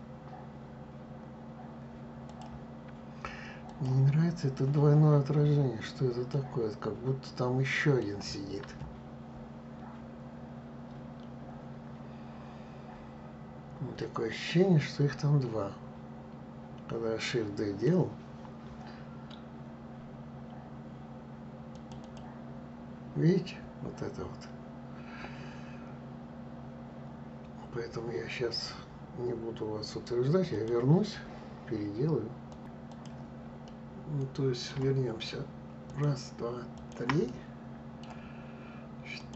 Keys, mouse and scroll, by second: 2.3 click, 3.7 click, 4.3-4.7 scroll up 2, 5.0 scroll up 2, 6.4-9.4 middle drag, 14.0-17.1 middle drag, 21.8 click, 22.0 click, 32.7 click, 33.3-35.5 middle drag, 35.5 shift+click, 36.4 shift+click, 36.9-38.8 middle drag, 38.8 shift+click.